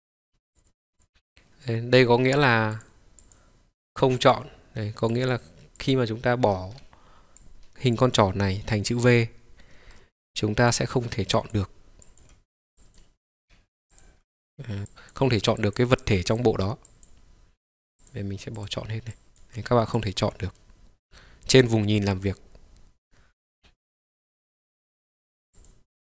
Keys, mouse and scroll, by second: 0.0-4.4 ctrl+drag, 5.2-6.5 drag, 10.8-11.1 drag, 11.4 click, 12.2 click, 13.0 click, 14.0 click, 15.0-18.7 drag, 19.3 click, 20.1-20.7 drag, 20.7-21.7 middle drag, 25.7-26.0 drag.